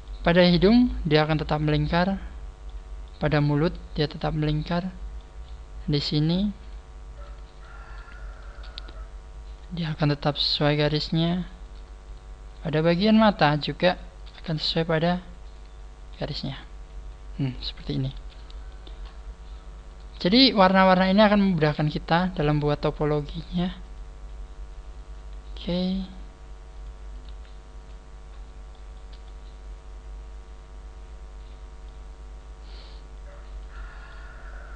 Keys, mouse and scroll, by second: 0.5-1.1 scroll up 4, 1.1 middle click, 2.7 middle click, 3.5 shift+middle click, 4.7-5.2 scroll down 4, 5.1 shift+middle click, 5.7-6.2 scroll up 1, 6.2 right click, 6.2 scroll up 1, 6.6 shift+right click, 7.1 shift+right click, 7.5 shift+right click, 7.9 shift+right click, 8.3 shift+right click, 10.1 click, 10.6 shift+middle click, 11.7 right click, 12.0 shift+right click, 12.5 shift+right click, 12.9 shift+right click, 13.4 shift+right click, 15.4 click, 16.0 a, 16.2-16.6 scroll down 4, 16.6 middle click, 18.1 KP_1, 18.6 scroll up 5, 19.9 right click, 19.9 scroll up 3, 20.3 shift+right click, 22.9 g, 25.7 right click, 26.0 g, 26.9 click, 27.1 right click, 27.3 g, 27.9 click, 28.3-28.6 scroll down 4, 29.2 shift+middle click, 33.6 right click, 34.1 middle click.